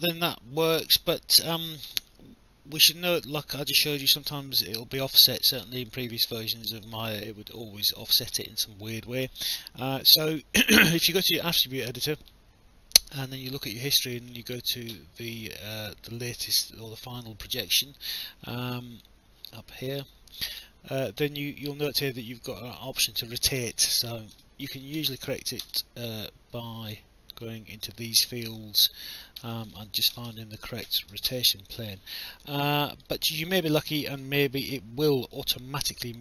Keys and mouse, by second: 1.0 alt+click, 7.1 alt+click, 8.9 click, 17.7 alt+click, 22.8 click, 23.6-25.5 typing, 25.6 Return, 27.3 click, 29.4 BackSpace, 30.9 0, 31.3 Return, 31.3 KP_Enter, 32.2 alt+click, 33.3 alt+middle click, 33.7 alt+click, 34.8 alt+middle click.